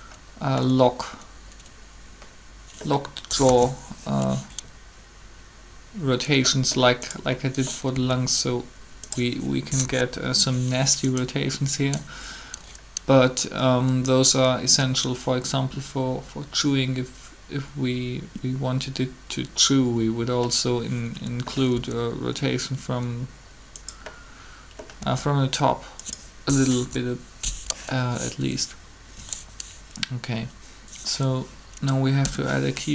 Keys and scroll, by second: 3.1 3, 7.9 r, 9.8 3, 21.7 r, 25.0 r, 26.7 3, 32.1 i.